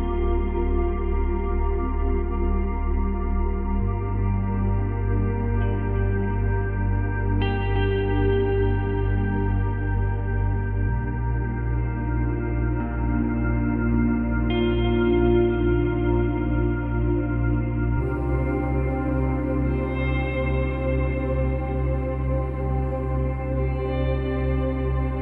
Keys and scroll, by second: 10.1 space, 11.6 space.